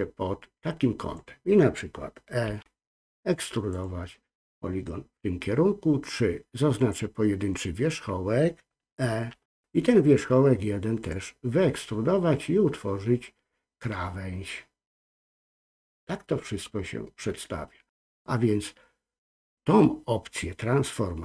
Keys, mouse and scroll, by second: 2.5 e, 6.8 click, 9.3 e.